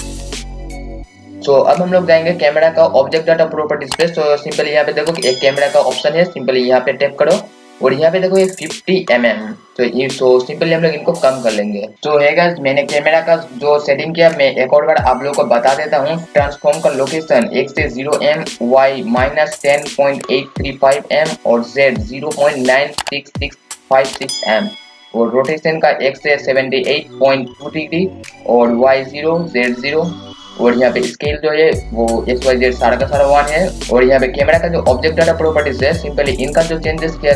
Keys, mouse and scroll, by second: 0.3-5.9 scroll up 1, 5.9-6.8 scroll down 1, 7.4 click, 11.9 click, 35.3 click.